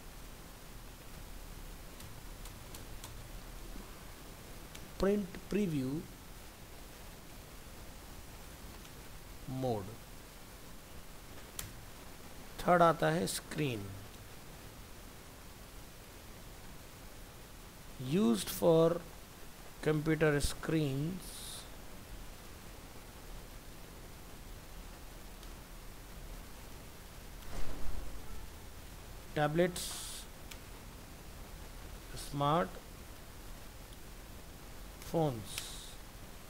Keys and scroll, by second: 2.0 ctrl+shift+Right, 11.8 ctrl+v, 20.5 ctrl+shift+Right.